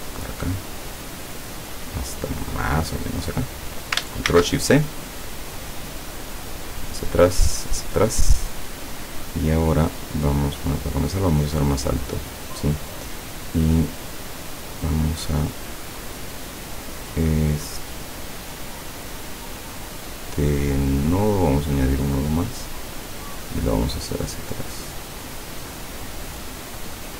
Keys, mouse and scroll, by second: 4.4 ctrl+shift+c, 5.6 click, 6.5 click, 6.8 click, 10.8 click, 15.6 click, 21.1 click, 22.1-26.7 drag.